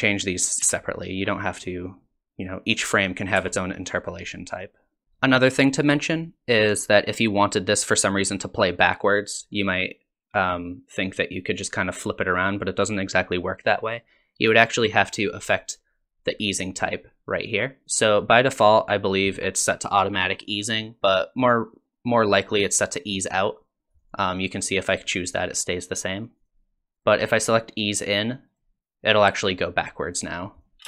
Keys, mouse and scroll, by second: 0.6 t, 3.4 t, 5.0 t, 15.0 click, 26.4 click, 26.9 click, 30.6 click.